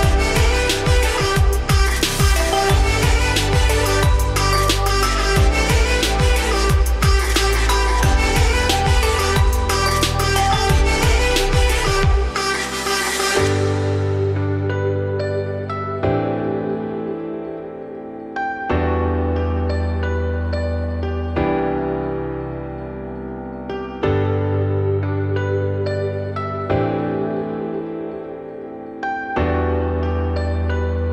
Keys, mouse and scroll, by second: 0.3-0.7 shift+middle drag, 0.7-1.5 scroll up 5, 1.5-3.2 right drag, 3.2 click, 4.0 click, 4.6-5.4 scroll down 6, 5.4 scroll down 2, 5.9 /, 6.3-6.7 middle drag, 6.7-7.1 scroll up 3, 7.1-9.0 middle drag, 9.0-9.7 scroll up 2, 9.7-11.0 middle drag, 11.0 Tab, 11.2 scroll down 3, 11.4 middle click, 12.0 2, 12.4 click, 12.7 alt+click, 13.4-13.7 scroll down 2, 13.8 e, 17.2-17.8 scroll up 2, 17.8 f, 18.2 middle click, 18.8 Tab, 19.0-21.4 middle drag, 21.4 scroll down 3, 21.6 middle click, 22.0 /, 22.2 scroll down 4, 22.4-24.6 middle drag, 24.6 ctrl+s, 24.9 scroll down 2, 25.1-25.6 middle drag, 25.6-25.9 scroll down 2, 25.9 shift+middle drag, 26.2-26.5 scroll up 2, 26.5-29.5 middle drag, 29.8 scroll down 3, 30.1-31.1 middle drag.